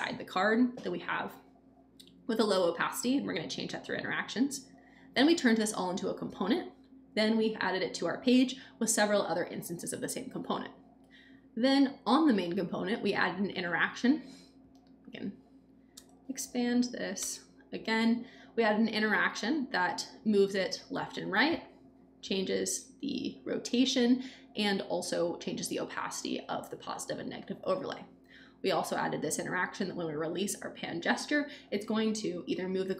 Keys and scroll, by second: 15.9 Return, 17.1 Return.